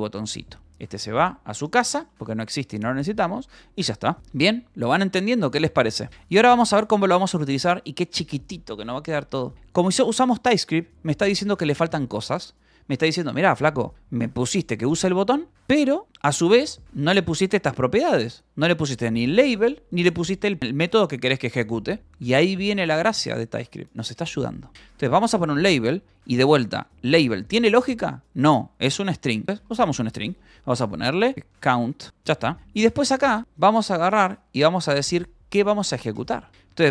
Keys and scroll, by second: 0.0-10.4 typing, 1.4 Escape, 2.4 Return, 4.2 Return, 24.6 space, 24.8 l, 25.1 e, 25.6 l, 28.5 =, 29.5 space, 31.1-32.5 typing, 36.4-36.9 typing.